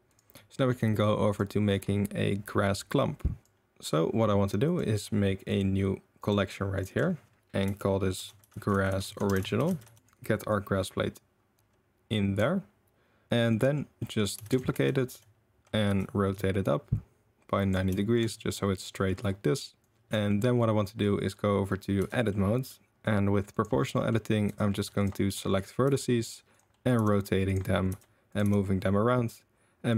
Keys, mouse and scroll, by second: 0.1 click, 0.5 shift+drag, 1.3 click, 4.6 click, 5.5 click, 6.9-10.0 drag, 8.9 s, 10.5-13.5 drag, 13.5 middle drag, 14.0 middle drag, 14.4 shift+d, 14.7 r, 17.9 shift+middle drag, 18.3-19.0 middle drag, 19.8 shift+middle click, 20.3 middle click, 22.0 Tab, 22.3 middle click, 22.5 click, 23.5 click, 23.9 click, 24.4 2, 24.7 1, 25.8 r, 26.7 middle click, 26.9 g, 27.9 r, 28.4 g.